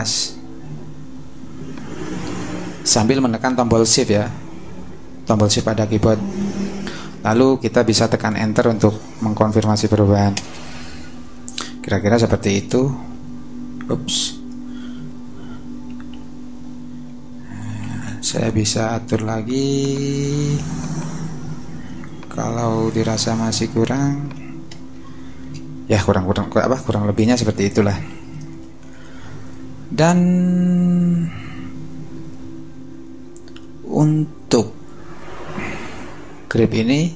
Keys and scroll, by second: 10.3 Return, 12.7 Up, 14.3 v, 15.2 Up, 16.1 Down, 17.8 super+t, 24.7 alt+shift+Return, 25.3 Return, 27.4 super+-.